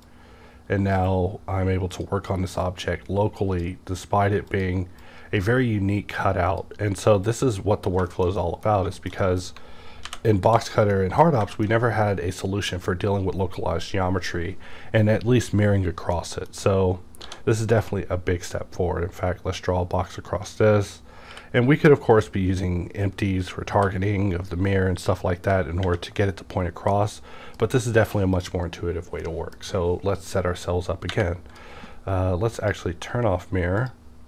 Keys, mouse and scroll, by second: 8.1 middle click, 8.4 middle click, 8.7 scroll down 2, 8.9 shift+middle click, 10.1 alt+v, 10.4 e, 10.9 middle click, 11.5 middle click, 16.1 middle click, 16.5 scroll up 1, 17.2-17.7 scroll up 1, 17.2 d, 17.8 click, 18.5-21.8 drag, 21.3 b, 21.8-23.0 scroll down 1, 23.7 t, 26.5-26.9 scroll down 1, 26.9-29.2 middle drag, 28.3 click, 29.2-32.6 middle drag, 30.3-33.8 drag.